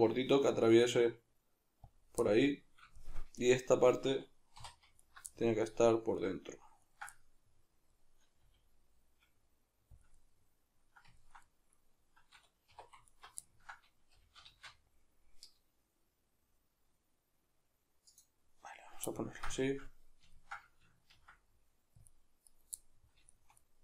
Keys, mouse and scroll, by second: 2.0 click, 2.2-5.0 middle drag, 4.6 3, 5.0 alt+right click, 5.3-6.2 middle drag, 6.2 right drag, 6.8 ctrl+right click, 7.1-10.0 middle drag, 8.4 g, 10.0 click, 10.1-13.1 middle drag, 12.7 2, 13.1 alt+right click, 13.5-18.2 ctrl+middle drag, 14.1 g, 18.2 click, 19.3-23.8 ctrl+middle drag, 21.2 ctrl+r, 22.6 right click.